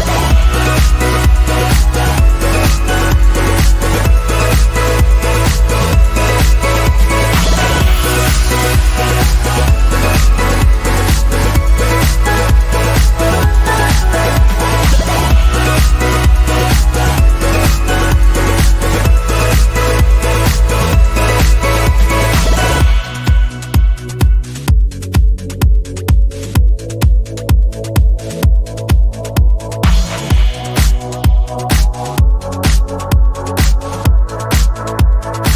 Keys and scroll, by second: 5.5 Up, 6.0 Up, 7.3 Up, 7.3 Down, 7.9 Up, 8.6 Up, 9.1 Down, 9.7 Down, 10.0 Down, 10.1 Down, 10.3 Down, 12.2 Down, 12.2 Up, 27.6 ctrl+c, 28.8 ctrl+c, 29.3 ctrl+v.